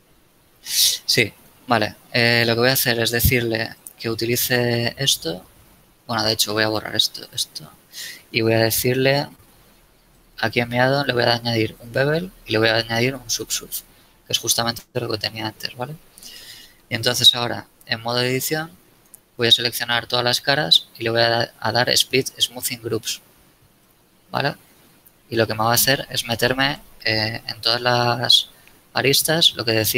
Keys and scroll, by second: 16.9 Tab, 19.5 a, 27.4 a.